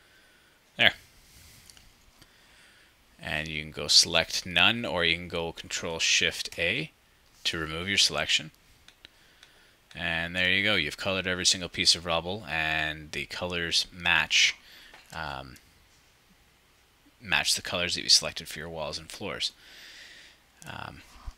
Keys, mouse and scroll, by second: 8.8 ctrl+click, 9.3-12.2 ctrl+drag.